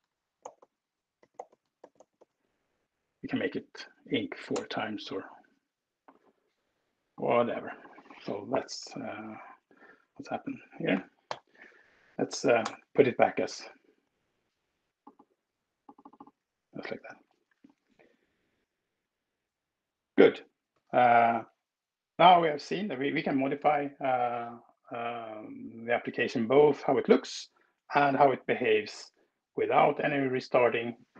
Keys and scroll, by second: 10.6 ctrl+alt+p, 10.9 ctrl+alt+r, 12.3 alt+Return.